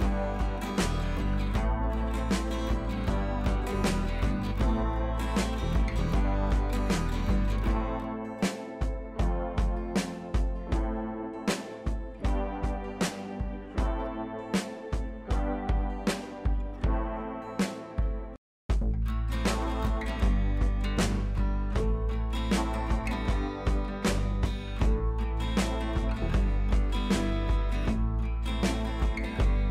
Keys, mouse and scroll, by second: 2.7 click, 4.5-10.3 drag, 10.5 scroll up 1, 10.7-12.2 drag, 12.6-14.7 typing, 12.8 scroll up 1, 13.2 click, 14.9 click, 23.8 scroll down 1, 24.8 click, 26.0 scroll up 1, 26.3-28.7 drag, 28.7 ctrl+a, 29.0 ctrl+c.